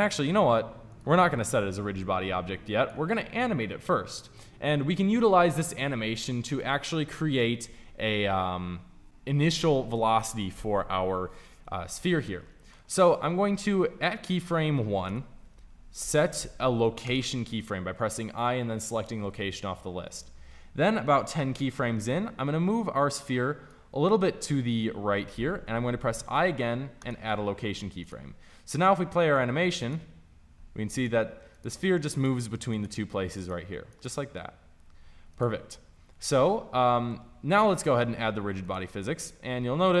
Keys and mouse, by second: 12.2-15.0 middle drag, 15.0 Right, 15.9 i, 20.7-25.6 drag, 25.6 i, 27.9-38.0 drag, 38.5-40.0 drag.